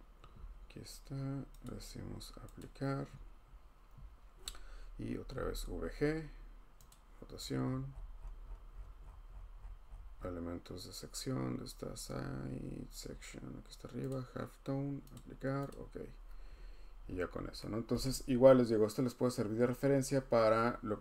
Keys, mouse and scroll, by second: 1.6 click, 2.6 click, 5.0-5.8 typing, 6.9 click, 7.3-10.3 scroll, 13.0-14.1 scroll, 14.1 click, 15.1 click, 15.7 click, 17.0-17.5 scroll, 18.0 scroll.